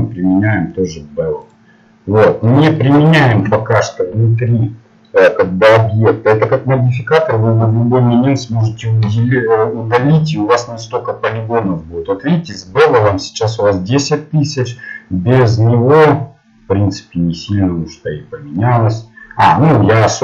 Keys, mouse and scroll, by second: 2.4 middle click, 14.6-16.7 drag, 15.7-17.4 middle drag.